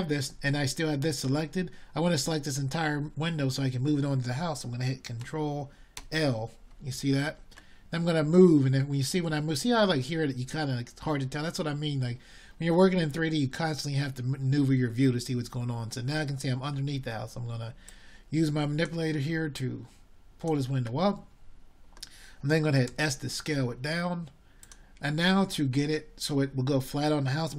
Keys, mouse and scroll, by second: 6.1 e, 10.5-18.5 drag, 18.5 ctrl+l, 20.4 drag, 21.8 click, 22.5-27.5 middle drag.